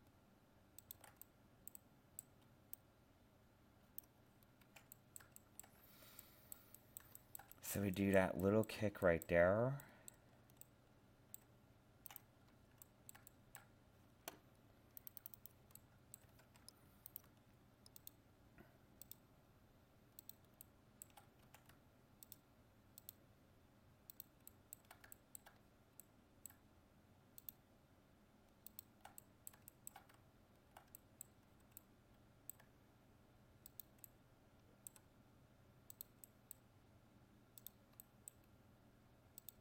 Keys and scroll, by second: 16.4 ctrl+Tab.